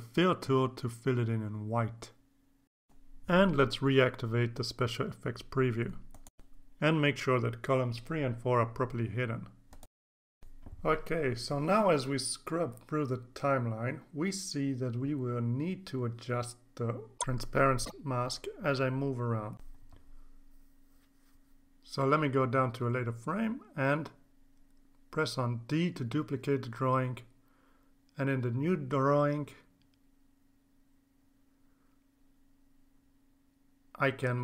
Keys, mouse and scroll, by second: 0.2 click, 2.1 click, 9.1 click, 9.5 click, 10.1 click, 13.7 click, 15.6-21.4 drag, 22.1 c, 22.2 right click, 24.6 click, 26.5 click, 28.4 click, 29.2 click, 29.8 click, 30.7-31.4 drag, 33.1 click.